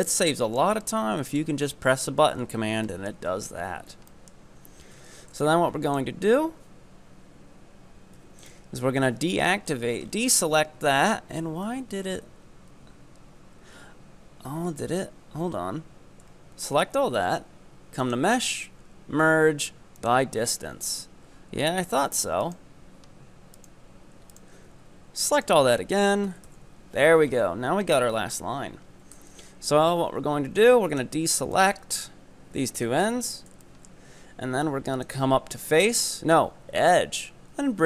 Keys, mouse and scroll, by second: 2.9-4.6 shift+middle drag, 4.6-5.0 scroll up 1, 5.0 b, 8.2 b, 9.7-10.2 scroll up 9, 11.7 ctrl+z, 12.1 ctrl+z, 15.4 a, 16.2-17.5 scroll down 11, 18.0-21.0 drag, 22.1-22.5 scroll up 3, 22.5 right click, 22.8-23.6 scroll down 3, 23.6 ctrl+right click, 24.4-26.3 ctrl+right drag, 26.3 4, 26.5 shift+e, 27.3-28.1 scroll up 5, 28.3-29.9 scroll down 4, 29.9 b, 31.3-31.6 scroll down 3, 31.6 shift+middle click, 32.0-32.6 scroll up 3, 32.6 b, 33.6-35.0 shift+middle drag, 35.0-37.8 drag.